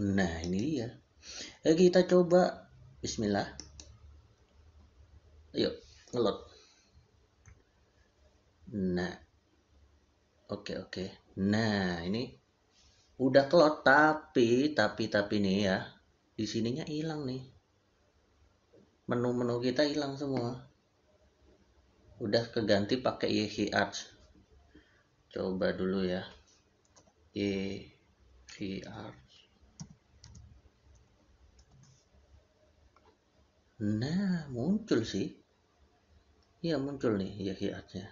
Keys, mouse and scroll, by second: 26.7 click, 26.8 y, 31.5 Return.